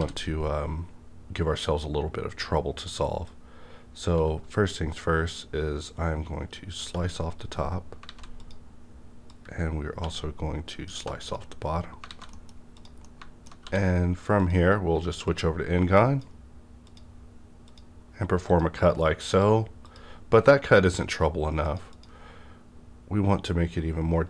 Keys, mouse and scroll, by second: 0.0 d, 0.0 KP_5, 3.3-6.8 drag, 3.3 d, 4.1 x, 6.8 space, 8.0 alt+a, 8.1 space, 8.4 click, 9.3-10.9 drag, 10.0 x, 10.9 space, 12.1 alt+a, 12.3 middle click, 12.7 click, 13.0-14.4 middle drag, 13.6 d, 14.4 click, 15.2-17.7 drag, 21.9 click.